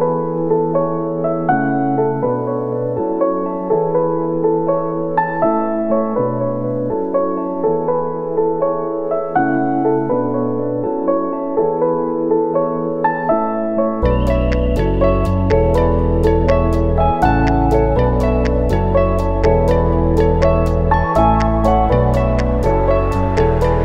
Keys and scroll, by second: 10.3 u, 11.6 ctrl+s, 21.8 Escape.